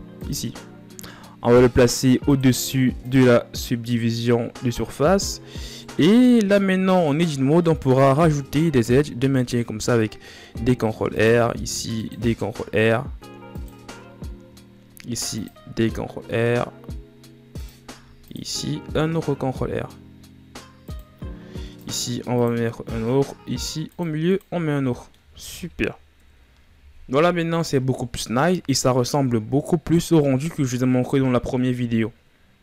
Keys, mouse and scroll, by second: 0.0-5.4 drag, 5.4-6.1 middle drag, 6.1 Tab, 7.3-8.5 middle drag, 8.5 ctrl+r, 11.2 ctrl+r, 13.7-14.6 scroll up 3, 14.6 ctrl+r, 17.5 ctrl+r, 24.2 scroll down 3, 24.5 middle click, 24.9 Tab, 25.8 KP_1, 26.2 a, 27.4-28.4 scroll down 8.